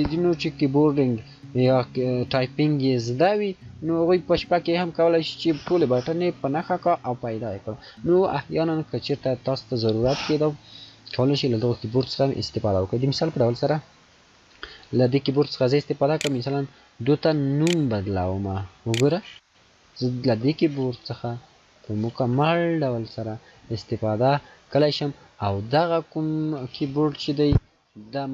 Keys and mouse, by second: 14.1 click, 14.1 F2, 18.9 o, 20.2 n, 21.7 e.